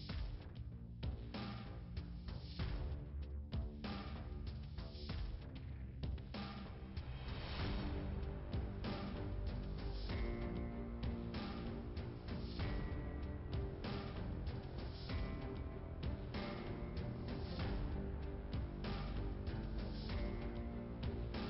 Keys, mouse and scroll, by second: 0.4 scroll down 2, 2.6 click, 5.0 click, 6.1 scroll down 1, 6.5 click, 7.3 scroll down 1, 9.8 1, 11.7 click, 13.0 click, 13.5 click, 13.7 click, 15.0 click, 17.0 middle click, 18.4 scroll up 1, 19.6 click, 20.6 click.